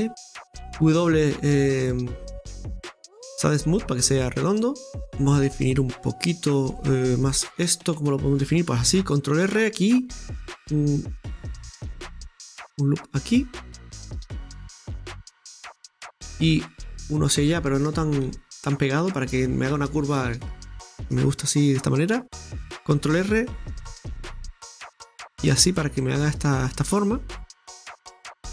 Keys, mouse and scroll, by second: 0.4 middle click, 0.7 w, 3.6-4.0 scroll down 4, 3.6 w, 4.0-5.0 middle drag, 5.0-6.8 scroll up 2, 6.8-8.8 middle drag, 8.8 ctrl+r, 15.2-18.3 middle drag, 16.3 ctrl+r, 18.3 ctrl+r, 20.0-20.6 scroll down 2, 20.6-21.9 shift+middle drag, 21.9-23.2 scroll up 2, 23.2 ctrl+r, 25.4 ctrl+r, 27.0-27.9 scroll down 1, 27.9-28.5 middle drag.